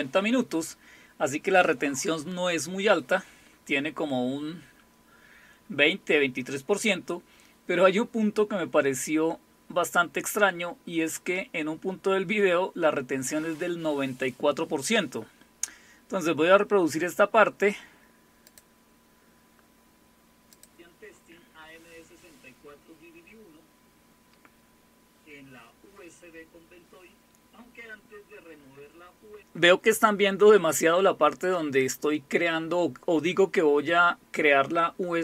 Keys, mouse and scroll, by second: 15.6-16.7 scroll up 2, 18.4 click, 20.5 click.